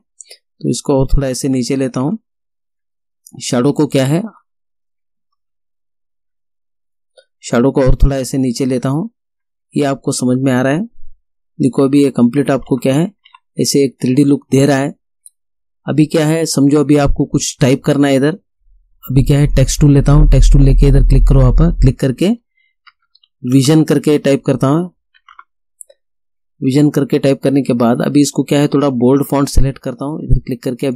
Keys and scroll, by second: 2.1 ctrl+z, 5.4 ctrl+z, 12.0 Up, 22.7-25.9 typing.